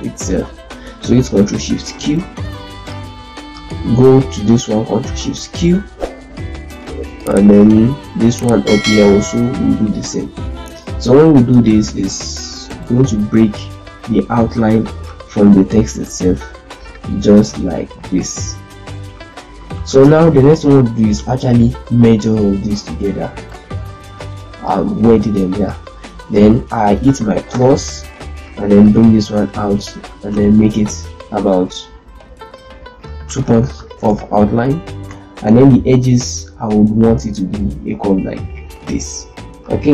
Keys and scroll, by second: 0.3 ctrl+z, 1.6 shift+q, 5.0 ctrl+shift+q, 14.1 ctrl+shift+q, 19.1 ctrl+z, 19.5 ctrl+z, 20.0 ctrl+space, 27.5 KP_Add, 33.7 Return, 35.0 F12.